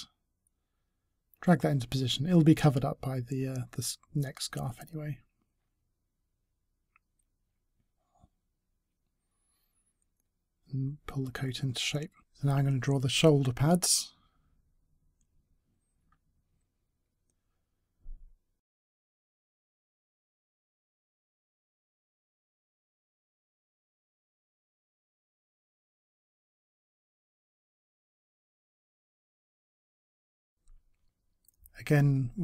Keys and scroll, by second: 13.9 space, 31.9 Delete.